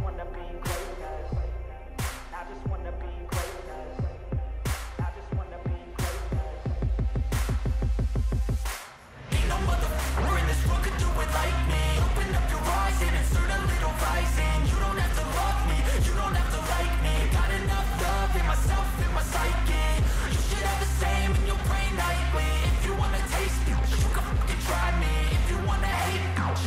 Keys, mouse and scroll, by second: 3.0 shift+click, 21.4 scroll down 1, 22.9 right click, 23.0 right click.